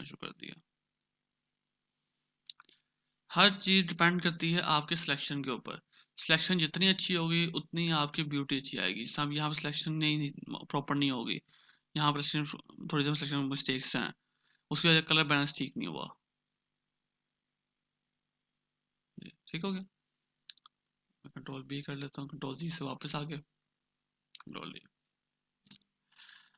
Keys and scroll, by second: 4.3 ctrl+d, 16.9 ctrl+alt+z, 17.3 ctrl+alt+z, 17.6 ctrl+alt+z, 17.9 ctrl+alt+z, 18.0 ctrl+alt+z, 19.1 ctrl+z, 19.2 ctrl+z, 19.4 ctrl+z, 19.5 ctrl+z.